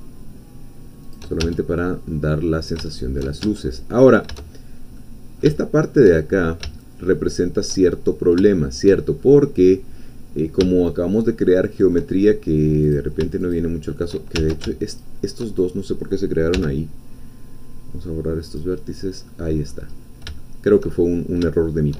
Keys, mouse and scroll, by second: 1.0 shift+click, 1.4 shift+Tab, 1.9-3.4 shift+drag, 3.4 shift+Tab, 3.9-4.3 shift+scroll up 1, 4.5-4.9 shift+scroll down 1, 5.0-6.1 middle drag, 6.6-8.5 shift+middle drag, 8.5 shift+middle click, 9.2-9.7 shift+scroll up 1, 9.7-12.5 middle drag, 12.9 click, 13.4 shift+click, 14.4 ctrl+shift+z, 14.9 ctrl+shift+click, 16.5 x, 18.5 click, 19.3 middle click, 19.4 click, 20.0 scroll down 2, 20.4 shift+click, 21.0-21.9 shift+drag.